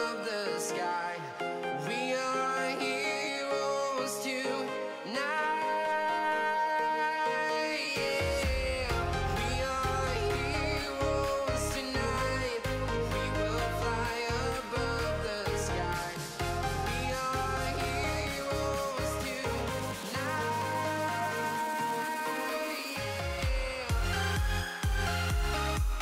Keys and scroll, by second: 18.8 Escape, 20.7 Escape.